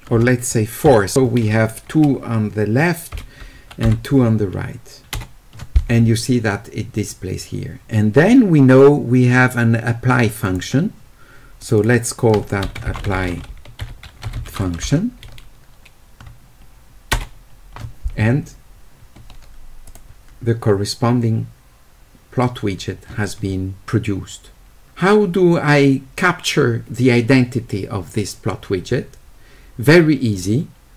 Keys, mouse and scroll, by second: 10.5 click, 11.6 click, 11.8 click, 13.0 q.